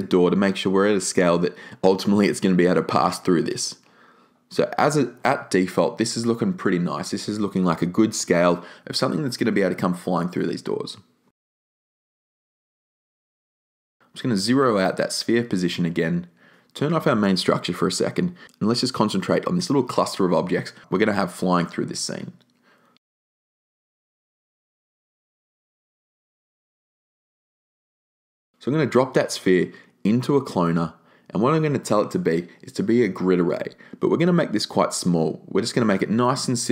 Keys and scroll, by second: 14.3 0, 14.5 Tab, 14.6 0, 14.7 Tab, 14.8 0, 15.2 Return.